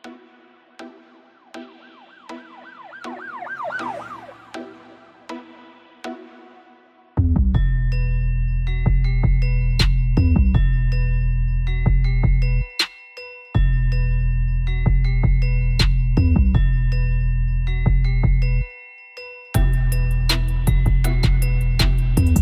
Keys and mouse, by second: 0.2 ctrl+z, 0.7 g, 3.3 w, 3.6 click, 4.5 w, 5.6 w, 6.4 right click, 6.6 w, 7.8 right click, 8.2 w, 8.5 middle click, 9.0 w, 10.3 click, 10.3 right click, 11.6 w, 12.0 click, 12.3 w, 14.4 w, 15.0 click, 15.5 w, 18.4 w, 21.6 w.